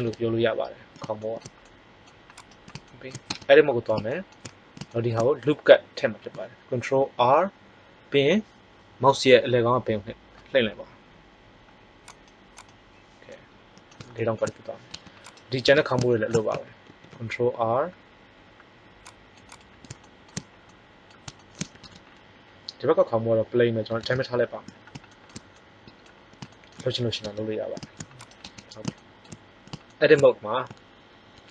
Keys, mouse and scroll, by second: 3.2 Tab, 6.9 ctrl+r, 12.6 click, 13.2-14.4 middle drag, 14.8 Tab, 15.2 right click, 15.6 Tab, 16.8 ctrl+r, 17.4 scroll up 1, 27.1 Tab, 28.1-29.3 right drag, 28.3 Tab, 31.4 ctrl+Tab.